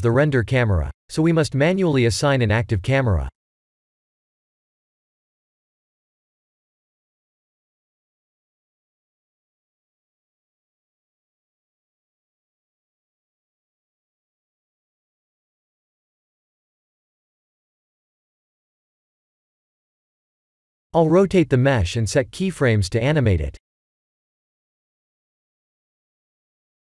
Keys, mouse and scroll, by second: 2.8 KP_0, 6.5 KP_0, 10.7 click, 12.3-13.3 drag, 14.5 KP_0, 17.3 click, 19.5 click, 20.4 click, 25.9 click.